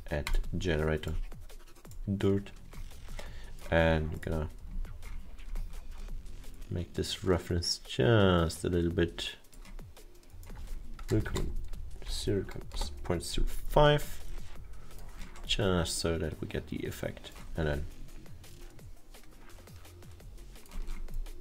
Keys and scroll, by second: 11.2 0, 12.2 5, 13.9 Return.